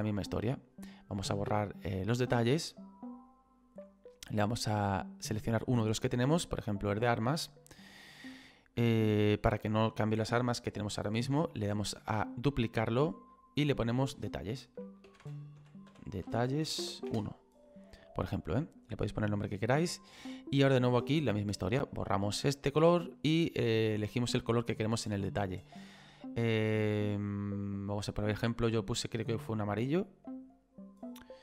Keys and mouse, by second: 3.1 click, 5.2 click, 7.2 click, 12.3 click, 13.6 click, 15.2 e, 16.8 space, 17.1 1, 18.0 click, 21.5 click, 26.5 click.